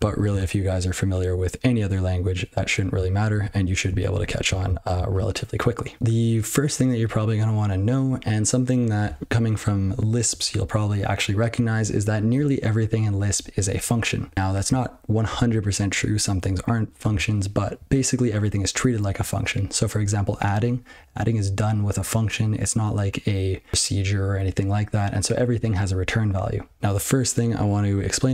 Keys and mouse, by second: 0.0 ctrl+g, 3.2 ctrl+n, 3.4 ctrl+n, 3.8 ctrl+n, 4.1 ctrl+l, 4.7 ctrl+l.